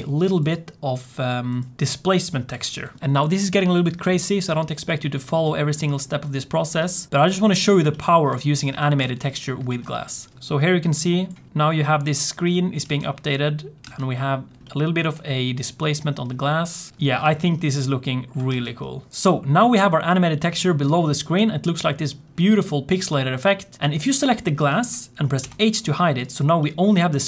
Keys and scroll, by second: 3.0 ctrl+t, 10.1 space, 10.4 space, 12.8 space, 13.8 space, 18.4 space, 25.3 h.